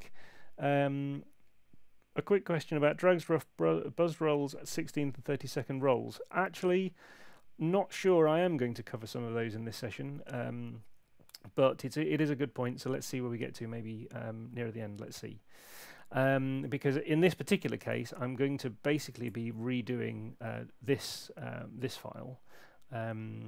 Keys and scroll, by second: 17.9 super+Tab, 19.2 super+Tab.